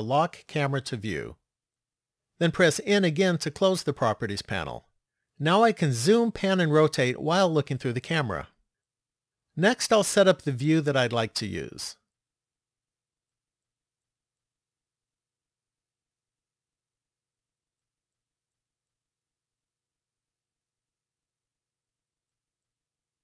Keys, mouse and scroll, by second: 0.2 click, 2.8 n, 9.7-11.1 scroll down 2, 11.3 middle click, 15.7 shift+middle click, 18.4 middle click, 22.8 shift+middle click.